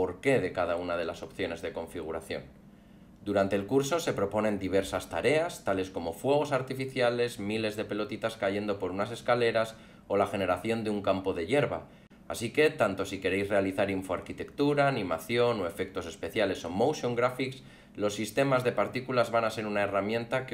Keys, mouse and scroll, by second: 0.3 click, 0.6 click, 0.7 click, 0.8 click, 0.9 click, 1.0 click, 1.2 click.